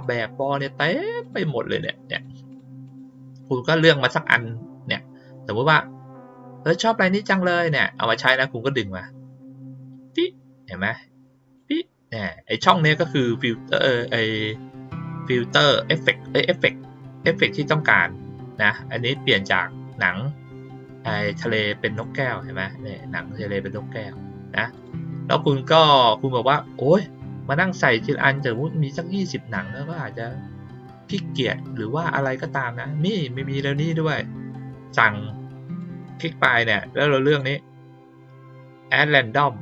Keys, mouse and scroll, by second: 0.2 middle click, 1.2 click, 1.7 click, 2.1 click, 2.4 click, 2.8 click, 3.3 click, 8.3-11.5 drag, 24.7 click, 35.7 click, 37.2 click.